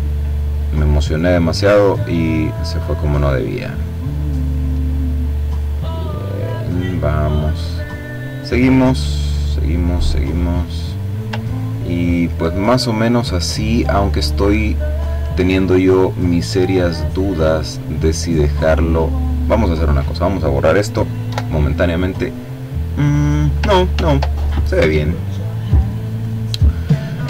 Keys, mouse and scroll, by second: 1.9 click, 6.2 click, 11.0-11.9 ctrl+scroll down 3, 11.9-12.7 ctrl+scroll up 2, 12.8-13.4 ctrl+scroll down 2, 13.4 ctrl+click, 14.1-14.5 ctrl+scroll up 3, 15.5 click, 16.2-18.0 drag, 18.6 click, 19.3 click, 20.7 Delete, 23.4 ctrl+z, 26.9-27.2 ctrl+scroll up 2.